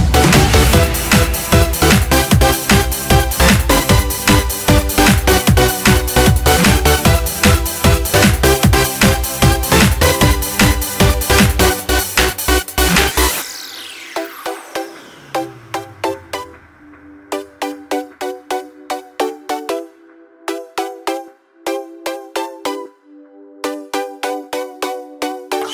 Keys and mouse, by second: 2.0 click, 6.0 r, 17.4-18.9 drag, 19.3-19.9 drag, 20.1-20.5 drag, 20.9-21.4 drag, 22.3 click.